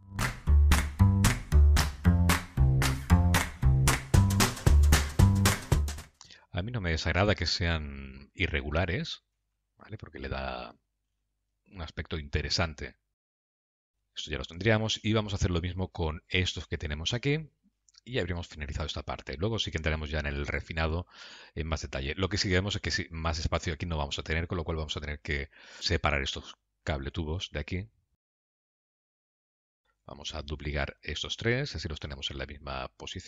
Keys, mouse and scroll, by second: 0.2 Tab, 0.6 click, 0.8 middle click, 1.0-4.0 typing, 1.2 scroll down 15, 1.4 middle click, 2.5 middle click, 2.7 click, 2.9 middle click, 3.5 middle click, 3.7 click, 3.8 click, 4.8 middle click, 5.1 click, 5.2 g, 5.5 click, 5.6 g, 5.9 click, 6.0 g, 7.8 middle click, 9.3 g, 11.5-12.2 scroll down 4, 11.9 middle click, 13.9 shift+middle click, 18.7 Tab, 20.1 shift+middle click, 20.7 middle click, 22.2-22.6 scroll up 2, 23.2 scroll up 2, 28.7 Tab, 29.6 Tab, 30.0 click, 30.8 shift+click, 32.5 shift+d.